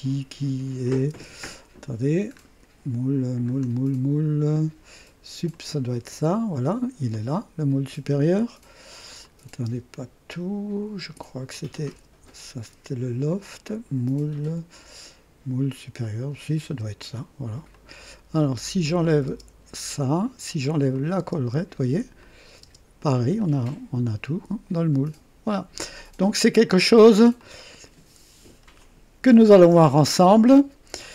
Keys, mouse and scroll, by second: 1.1 space, 2.3 scroll up 1, 3.5-3.8 scroll down 1, 5.5 click, 5.9 space, 6.0 space, 7.1-8.0 drag, 9.2 click, 9.7 space, 11.5 click, 11.9 space, 12.7 space, 16.0 click, 16.7 space, 17.7 click, 18.8 click, 19.3 space, 19.9-20.5 drag, 20.9 click, 21.2 typing, 22.2 click, 22.6 typing, 23.4-25.9 drag, 26.8-27.2 scroll down 1, 27.4-28.9 drag.